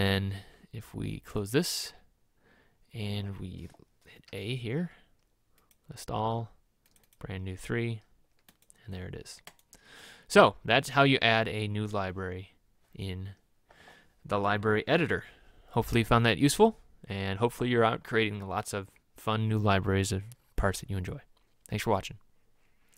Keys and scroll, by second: 4.4 a.